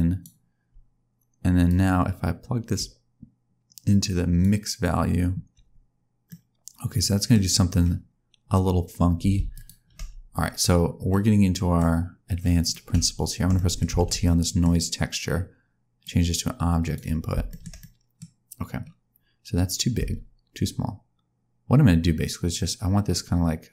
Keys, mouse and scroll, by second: 1.6 click, 5.8-6.2 scroll down 2, 6.2 middle click, 7.5-8.0 scroll up 2, 8.0 scroll down 1, 9.5 ctrl+shift+click, 11.0 middle click, 12.3 scroll down 1, 12.6 click, 13.5 middle click, 14.0 ctrl+t, 14.2 middle click, 14.8 scroll up 2, 16.0 click, 17.4 shift+middle click, 17.6 shift+scroll down 1, 17.7 middle click, 18.3-19.4 scroll up 2, 19.9 click.